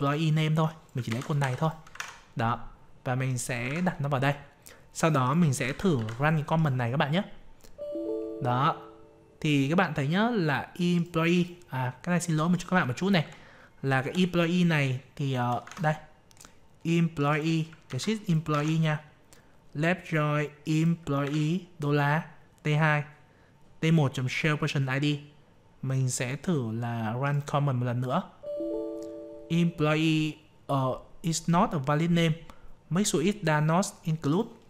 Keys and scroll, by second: 1.0 ctrl+c, 1.9 alt+Tab, 3.6 ctrl+v, 5.6 ctrl+a, 5.9 ctrl+c, 15.6 alt+Tab, 17.8 ctrl+c, 18.5 alt+Tab, 21.2 ctrl+v.